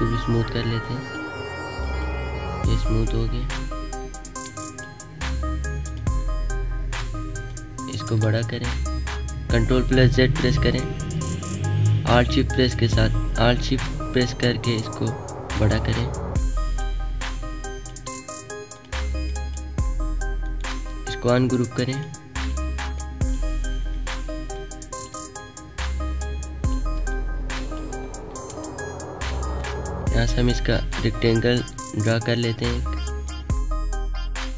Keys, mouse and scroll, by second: 0.7 click, 2.3 alt+scroll down 1, 2.9 alt+scroll down 1, 3.3 alt+Num_Lock, 3.4 alt+scroll down 1, 4.0 alt+scroll down 1, 4.5 space, 4.5 click, 7.4-10.5 alt+shift+drag, 10.5 ctrl+z, 12.3-18.7 alt+shift+drag, 20.4 right click, 21.8-26.1 drag, 26.1 alt+shift+click, 27.0 space, 27.2 click, 27.6 space, 28.1 alt+scroll down 1, 28.5 space, 28.6 click, 29.0 space, 29.5 click, 30.7 right click, 31.4-34.5 drag.